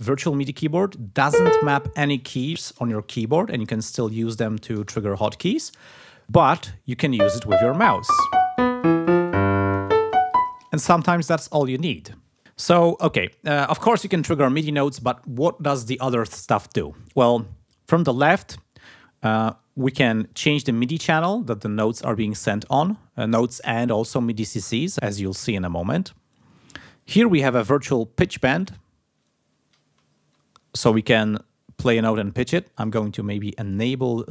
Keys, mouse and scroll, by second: 7.1 click, 7.4-10.5 drag, 20.2 click, 23.2 click, 28.6-32.0 drag, 32.7 click, 33.6 click.